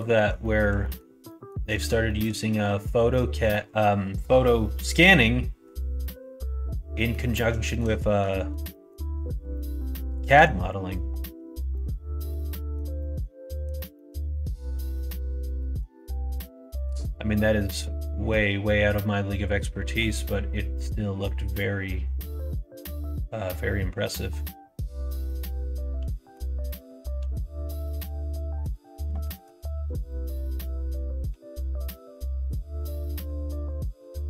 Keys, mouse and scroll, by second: 0.3 middle click, 0.8 middle click, 1.2 middle click, 2.0 shift+middle click, 2.7 middle click, 7.0 middle click, 7.5 shift+middle click, 8.0 middle click, 8.6 shift+middle click, 9.5 middle click, 10.8 middle click, 12.3 middle click, 12.9 middle click, 13.4 middle click, 13.9 middle click, 14.4 shift+middle click, 14.7 middle click, 15.5 middle click, 16.4 middle click, 17.8-19.9 middle drag, 20.2 middle click, 21.4 click, 22.3-24.0 middle drag, 24.1-26.3 middle drag, 27.1 e, 29.7 ctrl+z, 30.0 middle click, 31.2 e.